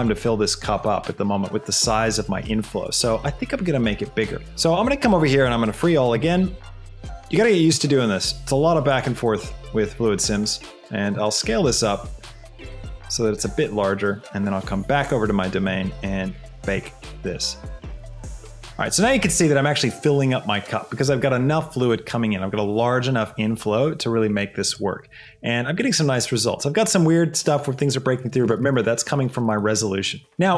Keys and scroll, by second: 4.4 ctrl+z, 11.4 s, 12.5 s, 25.2 space, 26.3 space.